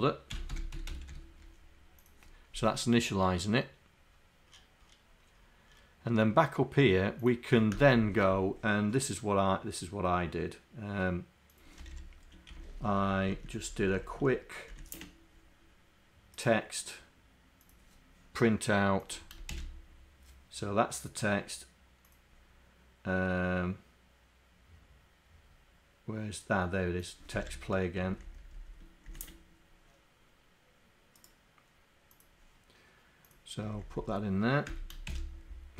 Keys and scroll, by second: 12.9 shift+Down, 13.2 shift+Down, 13.9 shift+Down, 28.2 shift+Down, 28.7 shift+Down.